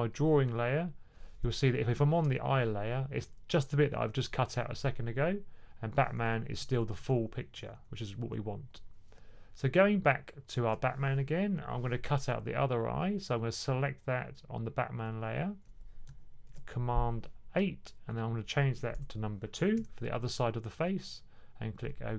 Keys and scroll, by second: 6.4-7.6 typing, 16.4 super+8, 19.6 2.